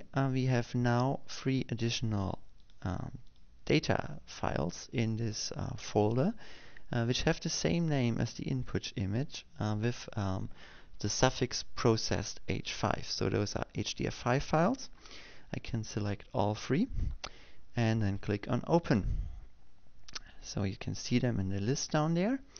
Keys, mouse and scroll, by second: 2.1 click, 3.2 click, 4.4 click, 5.0 click, 5.6 click, 17.7 ctrl+click, 18.4 click, 20.6 click.